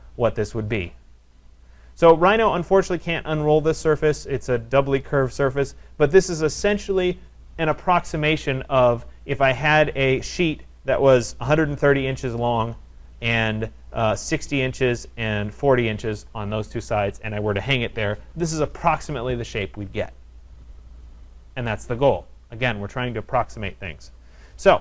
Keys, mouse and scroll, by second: 1.8 right click, 2.3 middle click, 2.4 middle click, 3.1 scroll, 3.2 click, 4.1-4.4 scroll, 5.0 right click, 7.6-8.2 scroll down 2, 24.1-24.8 scroll down 3.